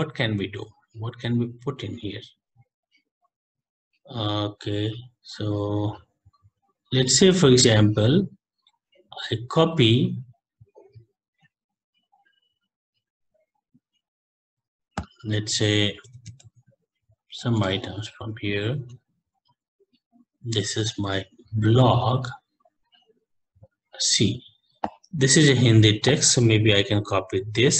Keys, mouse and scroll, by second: 0.9 Delete, 9.0 Up, 15.3 click, 15.9-16.8 typing, 17.6 Return, 26.1 click, 26.7 scroll down 1, 27.2-27.6 scroll down 11.